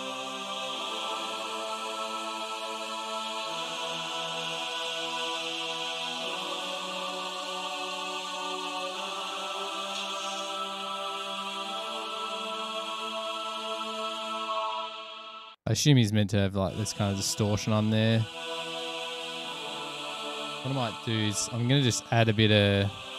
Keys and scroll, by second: 15.7 space, 15.9 space, 20.8 super+=.